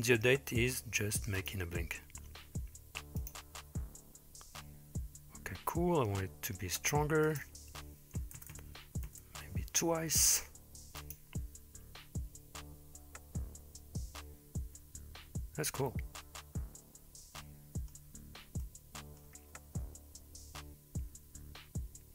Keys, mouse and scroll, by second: 1.4 click, 3.2 click, 7.3-9.3 drag, 8.5 KP_0, 11.0 click, 17.4-17.9 middle drag, 18.6-19.2 middle drag.